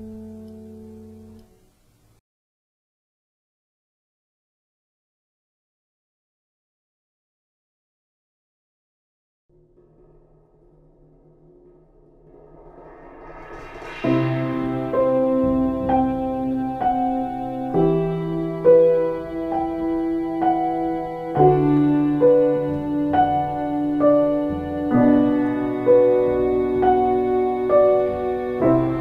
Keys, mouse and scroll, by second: 0.1 ctrl+space, 1.2 space, 15.1 ctrl+space, 20.0 ctrl+space.